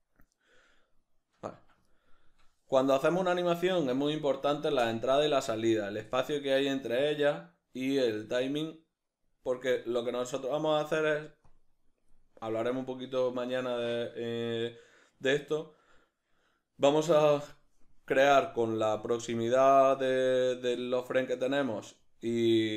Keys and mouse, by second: 1.5 Escape, 11.5-22.7 drag.